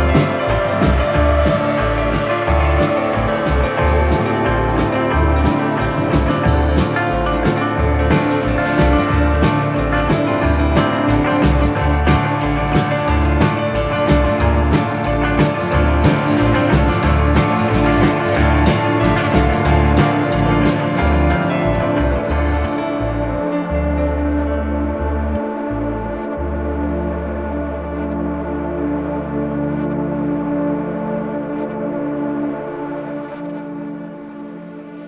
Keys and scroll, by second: 1.1 Escape, 1.3 F3, 1.7 Escape, 32.2 Delete, 32.8 F3, 33.4 Escape.